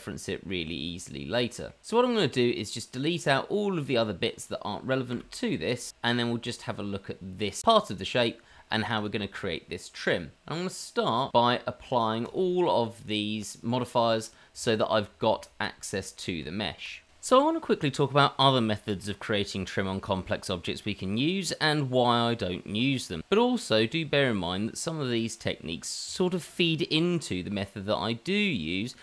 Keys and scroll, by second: 5.3 Delete, 6.2 Delete, 14.3 Tab, 15.2 Tab, 15.9 Tab, 16.8 Tab, 17.3 shift+d, 18.1 shift+d, 18.5 shift+r, 19.2 shift+r, 19.7 Tab, 20.3 Tab, 20.9 k, 21.4 k, 23.8 Tab, 24.3 Tab, 24.3 shift+z, 24.5 Tab, 24.5 shift+z.